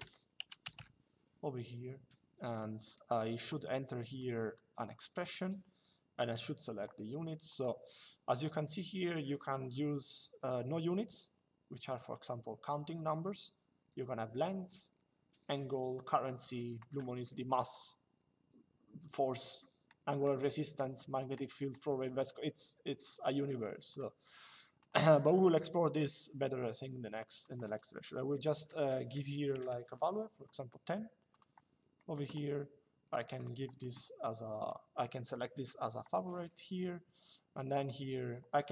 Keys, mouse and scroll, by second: 2.3 click, 3.9 click, 7.2 click, 14.1 click, 23.6 click, 26.9 click, 31.0 click, 33.0 click, 37.5 click.